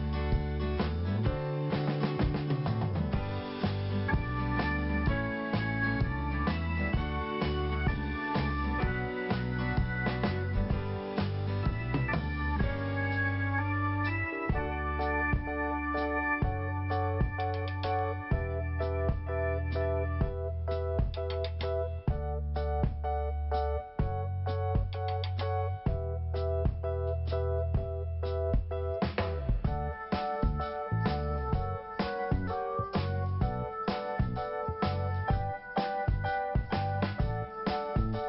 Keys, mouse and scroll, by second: 0.6 click, 2.6 click, 4.4 scroll down 1, 5.1 scroll up 1, 8.3 click, 9.8 scroll down 1, 10.7 t, 11.6 scroll up 2, 13.0 click, 13.1 click, 13.8 click, 13.9 click, 14.5 scroll up 2, 16.1 click, 17.0 click, 17.1 click, 18.5 click, 18.6 click, 19.0 click, 19.1 click, 20.4 click, 23.6 click, 24.1 scroll down 1, 24.9 scroll up 2, 25.9 click, 26.0 click, 26.5 click, 29.9 scroll down 1, 30.5-31.0 scroll up 1, 31.0 click, 31.4 double click, 31.7 double click, 34.2 click, 35.6 click, 36.0 scroll down 2, 36.6 scroll up 1, 37.7 click.